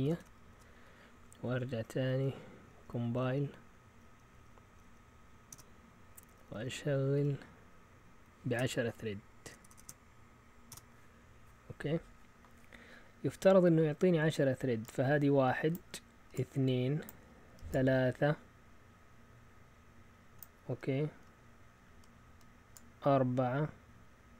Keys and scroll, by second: 0.0-0.7 typing, 1.1 Up, 1.4 Up, 1.7 Up, 2.0 Up, 2.7 Up, 2.8 Up, 3.0 Up, 3.2 Up, 4.0-5.0 Up, 4.0-4.8 typing, 5.5 Return, 8.5-11.2 typing.